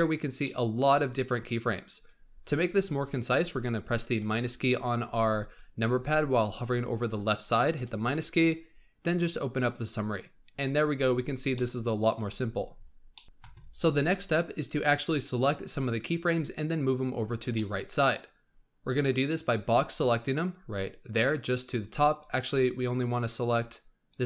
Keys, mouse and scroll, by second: 0.0-0.4 scroll down 4, 0.4-4.1 middle drag, 4.1 KP_Subtract, 7.7 KP_Subtract, 9.5 click, 10.9-11.5 scroll up 8, 11.5 middle click, 12.1-13.0 scroll up 11, 13.0-14.5 middle drag, 14.5 click, 17.5 middle click, 17.8-19.1 scroll up 1, 19.1-22.1 drag, 22.4-24.2 drag.